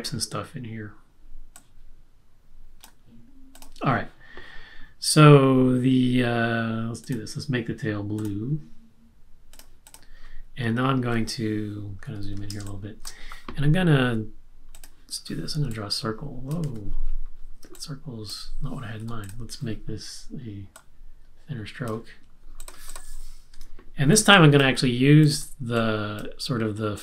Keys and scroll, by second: 12.0 super+=, 12.6 space, 16.6 super+z, 19.0 v, 23.5 BackSpace.